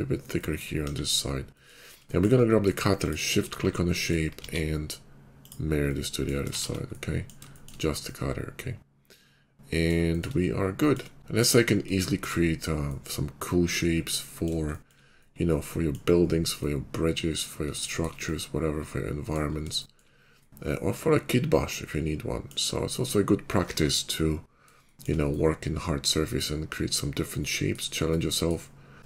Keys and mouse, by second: 0.8 KP_5, 3.0-5.4 shift+middle drag, 4.3 alt+x, 6.4 shift+middle click, 6.4 shift+2, 8.0-10.8 middle drag, 11.0-28.9 middle drag, 28.9 click.